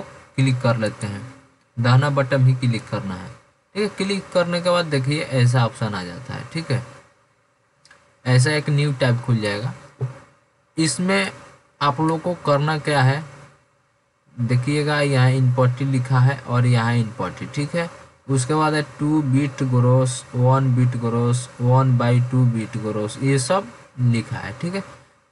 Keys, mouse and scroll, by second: 2.0-2.3 drag.